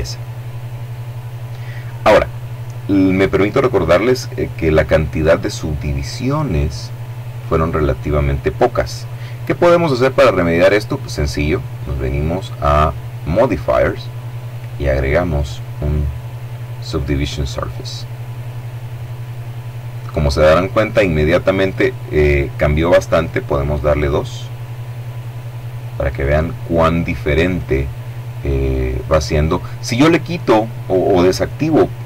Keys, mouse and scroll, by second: 11.2 click, 14.0 click, 17.8 click, 23.4 click.